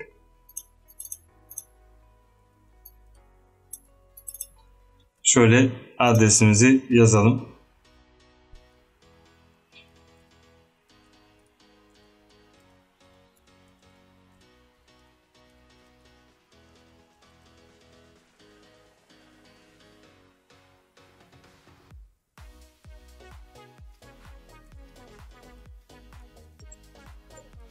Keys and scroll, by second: 5.3 a, 7.4 a, 9.8-18.4 typing, 21.9 space, 24.6-27.7 typing.